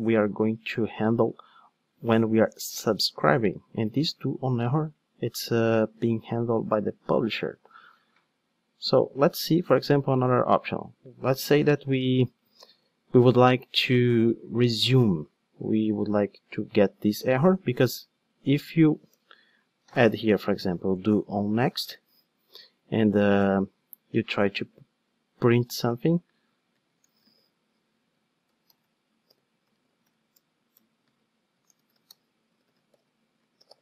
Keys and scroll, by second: 4.1 super+x, 11.9 super+c, 21.2 Return, 30.4 Return.